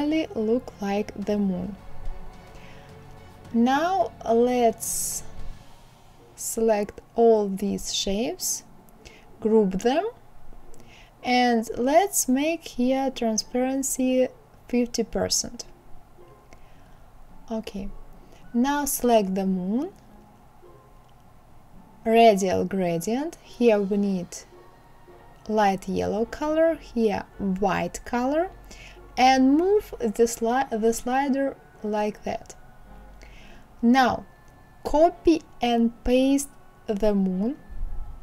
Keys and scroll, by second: 11.8 KP_5, 12.1 KP_0, 12.3 Return, 35.0 ctrl+c, 36.2 ctrl+f.